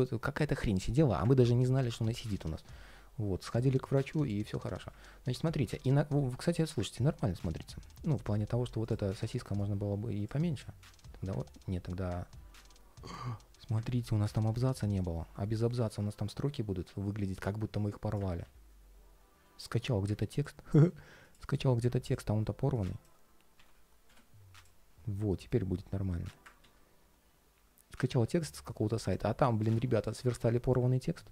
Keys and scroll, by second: 1.7 ctrl+shift+3, 6.7 ctrl+shift+4, 10.2 ctrl+shift+4, 12.3 super+z, 18.1 super+z, 20.6 super+c, 26.3 super+z.